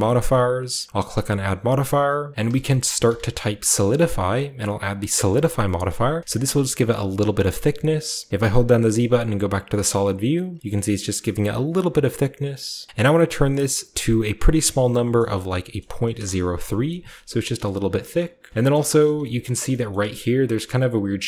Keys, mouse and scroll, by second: 0.3 drag, 1.0 click, 2.4-3.0 typing, 4.8-6.3 drag, 5.8-8.3 middle drag, 6.1 scroll up 1, 6.3-8.3 scroll down 1, 8.3-8.8 z, 9.9 middle click, 9.9-11.5 scroll up 1, 10.2 typing, 10.7-12.7 shift+middle drag, 12.9-15.6 drag, 15.0 BackSpace, 15.1 BackSpace, 15.6 BackSpace, 16.1 3, 16.1 Return, 16.8 scroll down 1, 17.6-18.5 middle drag, 17.6-18.5 scroll up 1, 18.5-21.2 shift+scroll up 1, 18.7 shift+middle click, 18.9 shift+middle drag, 18.9 typing, 19.4 shift+middle drag, 19.9-21.2 shift+middle drag.